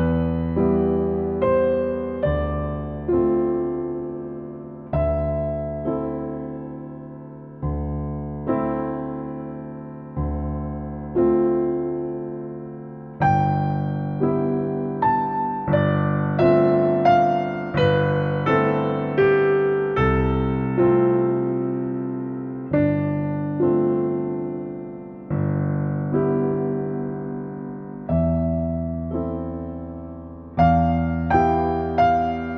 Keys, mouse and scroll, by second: 2.4 click, 4.5 middle click, 5.5-6.1 scroll down 1, 6.1 middle click, 6.7-7.1 scroll up 1, 7.1-7.9 scroll down 1, 7.9 click, 8.4-8.9 scroll down 1, 8.9 middle click, 10.2-10.7 shift+scroll up 1, 11.8 click, 12.8 click, 14.0 click, 15.2-15.8 scroll down 1, 16.2 click, 17.3-17.8 scroll up 1, 17.8-18.5 scroll down 1, 18.5 click, 20.8 click, 21.9 space, 22.6 click, 24.3 click, 25.4 click, 25.9 click, 27.4-28.8 typing, 28.9 Return, 31.3 click, 31.9 click.